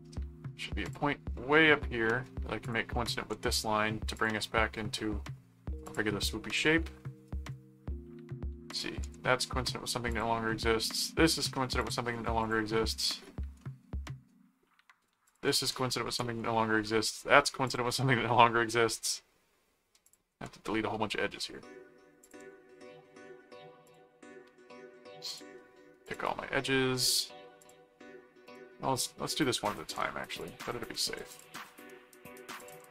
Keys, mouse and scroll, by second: 0.8 click, 2.6 ctrl+alt+click, 3.3 alt+d, 4.1 click, 5.8 click, 8.7 click, 10.1 click, 11.8 click, 12.4 click, 13.6 middle click, 15.2 click, 17.6 click, 20.0 click, 21.4 middle click, 22.2 click, 23.9 ctrl+click, 25.3 ctrl+click, 26.0 ctrl+click, 27.6 click, 28.4 click, 29.9 click, 31.3 ctrl+click, 32.6 ctrl+alt+click.